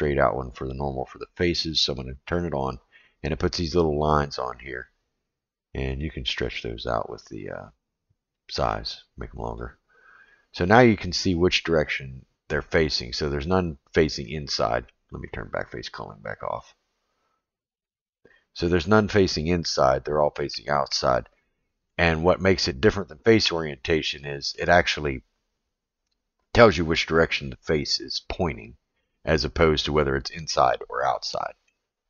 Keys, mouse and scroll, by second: 5.9-9.8 drag, 10.2-13.5 middle drag, 14.2 middle click, 16.7-18.1 drag, 18.6 middle click, 20.7-21.9 middle drag, 24.0-24.5 middle drag, 29.1-29.6 middle drag, 30.5-31.7 middle drag.